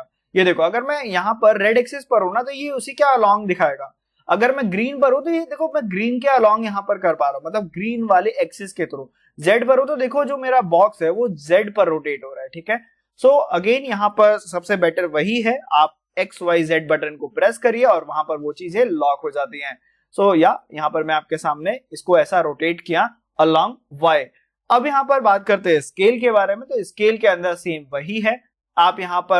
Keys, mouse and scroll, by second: 16.7 y, 20.4 click, 26.0 s.